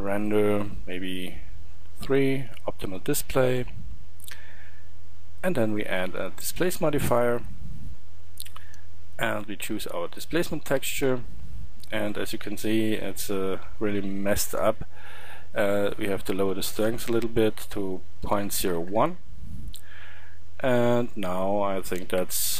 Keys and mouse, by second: 20.5-22.5 middle drag.